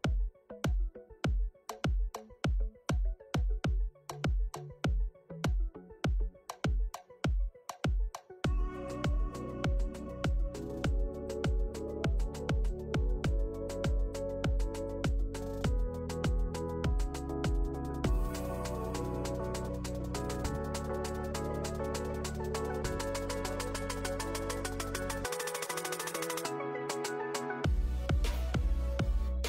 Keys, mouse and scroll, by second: 20.7 n, 22.4 click, 22.7 shift+middle click, 23.3 shift+middle click, 23.5-24.0 scroll up 1, 24.0 click, 25.2 KP_3, 25.6 KP_1, 25.9 Tab, 28.9 alt+shift+click, 29.0 click.